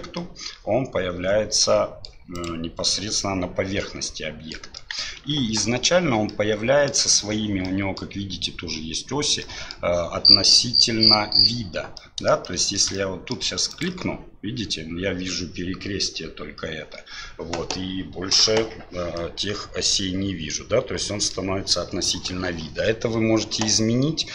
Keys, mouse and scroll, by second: 0.1-2.0 middle drag, 2.3 click, 2.9-4.5 middle drag, 5.0 KP_1, 5.3 KP_7, 6.3-6.9 middle drag, 7.6-8.0 middle drag, 9.4 middle drag, 12.0 middle click, 12.4-12.8 shift+middle drag, 12.9 middle click, 13.7 click, 19.2-21.3 middle drag.